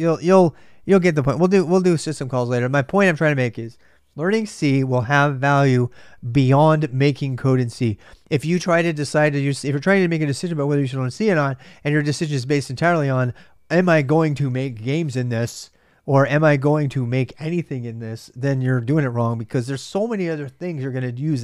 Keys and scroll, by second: 1.1-2.0 typing.